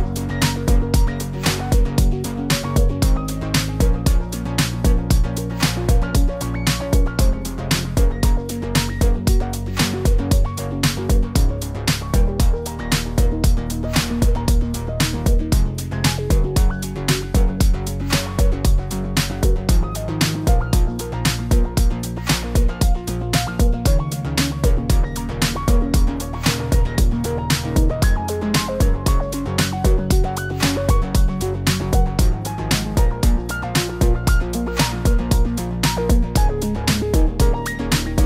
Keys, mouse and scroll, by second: 0.2 click, 0.2 shift+middle click, 0.5 click, 0.5 click, 0.8 click, 1.1 click, 1.1 click, 1.5 click, 1.5-1.9 scroll down 5, 1.6 middle click, 1.9 middle click, 2.6 shift+middle click, 2.7 scroll up 2, 3.0 click, 3.1 click, 3.3-3.7 scroll down 4, 3.3 middle click, 3.6 middle click, 4.7 middle click, 5.3-5.6 scroll up 2, 5.5 middle click, 5.6 Tab, 6.0 click, 6.4 click, 6.4 shift+click, 6.5 shift+click, 7.2 click, 7.7 click, 8.2 click, 8.4 click, 8.8 click, 8.9 shift+click, 9.0 click, 9.9 click, 10.1 middle click, 10.9 click, 11.0 click, 11.3 click, 11.3-12.0 scroll down 8, 13.6 click, 14.9 click, 15.0 click, 16.3 click, 17.0 click, 17.2 click, 17.8 click, 18.8 click, 19.5 BackSpace, 19.8 click, 20.8 click, 21.7 ctrl+shift+Left, 21.8 ctrl+shift+Left, 22.6 click, 23.2 Left, 23.6 click, 24.2 click, 24.4 click, 24.6 BackSpace, 25.7 click, 26.3 click, 26.9 click, 28.2 click, 28.8 click, 29.6 click, 30.1 click, 31.4 click, 31.9 click, 33.2 click, 33.6 click, 34.1 click, 34.3 click, 34.7 click, 34.9 click, 35.1 click, 35.4 click, 36.0 click, 36.3 click, 36.7 click, 36.9 click, 37.7 click.